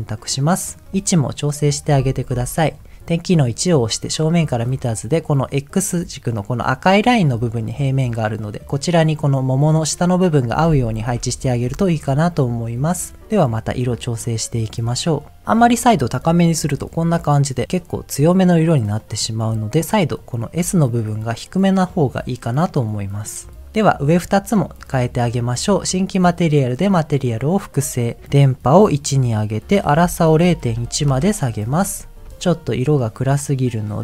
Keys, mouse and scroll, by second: 0.7 click, 0.9 middle click, 2.3 KP_1, 7.8 middle click, 11.0 KP_1, 12.6 middle click, 13.8-14.9 scroll up 1, 14.9 click, 18.9 click, 24.1 click, 24.5 click, 25.0 click, 26.8 click, 28.5 click, 29.7-31.1 drag, 32.0 scroll up 3, 32.3 shift+middle click, 33.7 click.